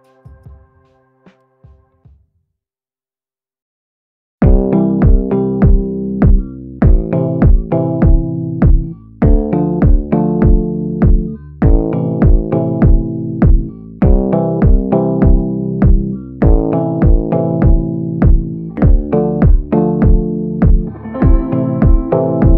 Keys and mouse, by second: 2.4 ctrl+i, 3.0 b, 4.1-5.3 drag, 5.5 a, 6.4 b, 7.9 ctrl+i, 8.4 b, 9.3 click, 10.1 a, 13.6 middle click, 14.5 middle click, 15.4 ctrl+i, 16.1-21.7 typing, 22.2 middle click.